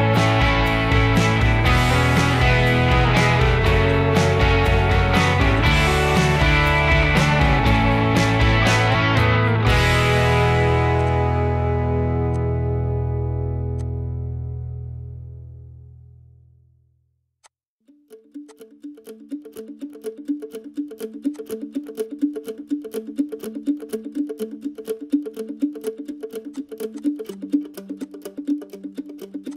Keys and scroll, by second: 9.2 e, 10.4 Escape, 13.1-16.2 typing, 18.7-20.3 typing, 21.8 Delete, 26.2 m, 27.1 ctrl+g.